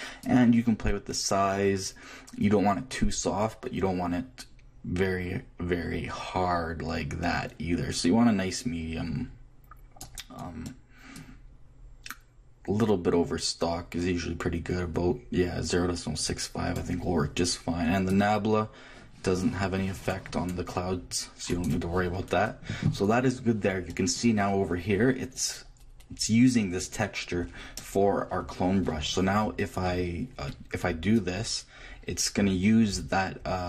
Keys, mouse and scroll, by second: 0.2-2.0 drag, 11.1-13.0 drag, 18.1-20.0 drag, 31.1-33.0 drag.